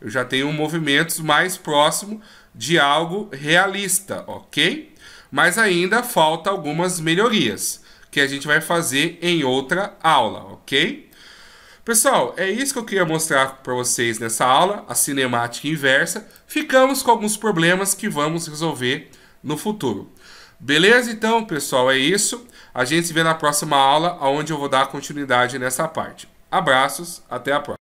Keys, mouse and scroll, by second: 5.5 middle click, 7.1-7.6 scroll down 1, 7.6-8.2 scroll up 1, 8.2 right click, 8.2-8.7 scroll up 2, 8.8 g, 11.1 middle click, 13.6 shift+scroll down 1, 14.3 middle click, 14.3-14.6 shift+scroll down 2, 16.3 right click, 17.0 right click.